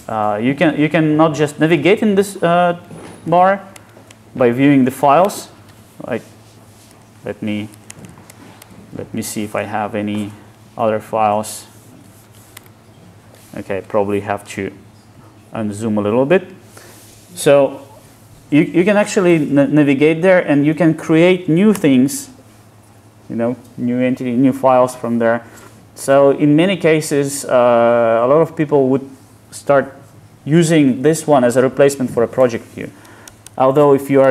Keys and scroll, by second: 14.7 alt+space, 21.9 super+n.